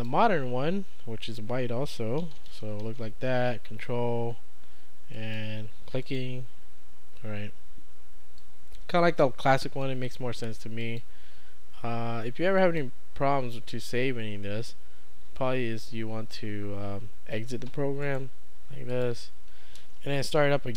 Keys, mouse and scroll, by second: 2.0-3.2 typing, 5.2 click, 10.8 click, 12.6 click, 17.3 click, 18.1 right click, 18.9 click.